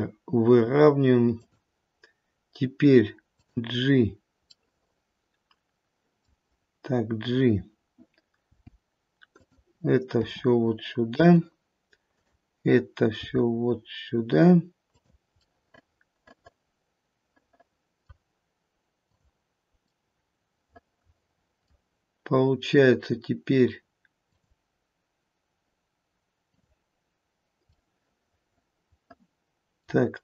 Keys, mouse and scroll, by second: 3.3 click, 4.5 middle click, 6.0 middle click, 8.5 g, 10.2 r, 12.0 click, 13.0 g, 15.4 middle click, 17.7 middle click, 17.9 middle click, 19.0 click, 20.3 middle click, 24.2 click, 26.4 click, 27.7 scroll up 1, 28.0 middle click, 28.6 middle click, 29.3 middle click, 29.4 middle click.